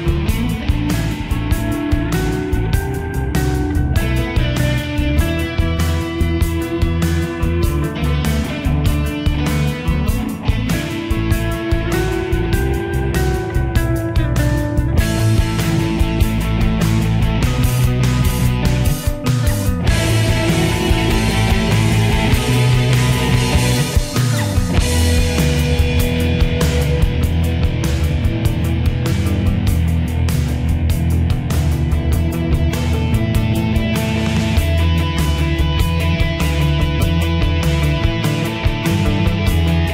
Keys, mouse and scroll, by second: 0.0 typing, 0.9 right click, 1.9 click, 6.2 shift+Page_Up, 8.0-10.1 drag, 10.1 right click, 10.9-18.5 drag, 19.5 shift+Page_Down, 20.2 click, 20.7 F4, 22.3 click, 23.8 typing, 24.5-30.2 drag, 30.6 F4, 32.8 alt+Down, 33.9-39.0 drag.